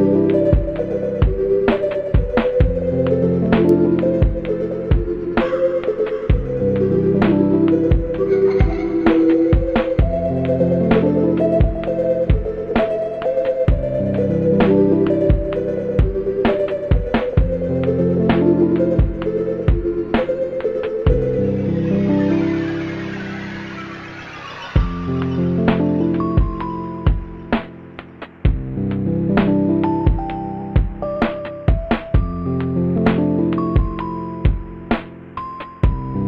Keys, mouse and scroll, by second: 0.1-3.5 typing, 3.8 ctrl+-, 6.4 ctrl++, 7.1-8.4 typing, 7.2 ctrl+z, 9.7 space, 10.1 space, 10.4 right click, 10.8 right click, 24.7 ctrl+z, 25.2 ctrl+z, 26.1 ctrl+z, 26.6 right click, 27.0 ctrl+z, 27.7 right click, 27.9 ctrl+z, 28.2 b, 29.2 ctrl+z, 31.1 ctrl+z, 31.4 right click, 31.9 right click, 34.7 ctrl+-.